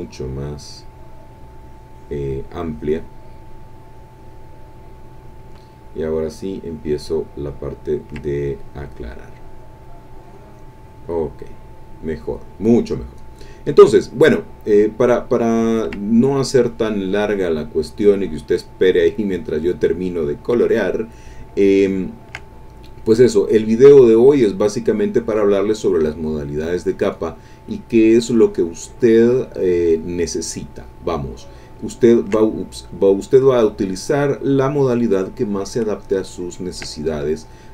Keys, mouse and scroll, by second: 0.0-5.4 drag, 6.8-13.9 ctrl+drag, 14.7-21.2 ctrl+drag, 22.2 ctrl+click, 22.5-25.9 ctrl+drag, 26.0-31.4 drag, 32.2 ctrl+click, 32.6-35.2 ctrl+drag, 36.6-37.7 ctrl+drag.